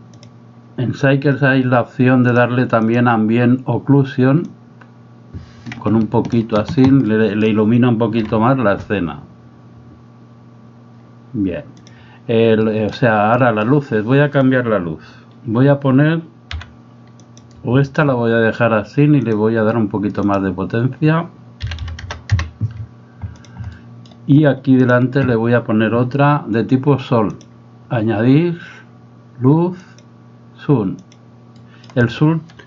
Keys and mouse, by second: 2.8 click, 4.6-6.4 drag, 7.0 middle click, 12.6 middle click, 13.4 middle click, 16.5 g, 20.3-22.7 drag, 23.3 click, 23.7 middle click, 27.4-31.2 drag, 31.6 middle click.